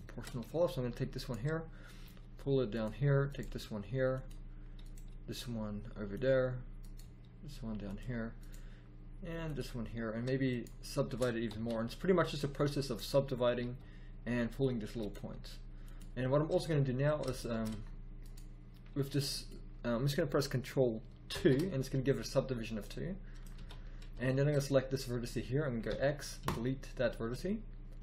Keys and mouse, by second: 1.9 g, 3.4 g, 5.0 g, 6.9 g, 8.4 g, 11.4 w, 13.6 g, 15.1 g, 18.8 g, 21.3 ctrl+2, 23.5 z, 25.8 x.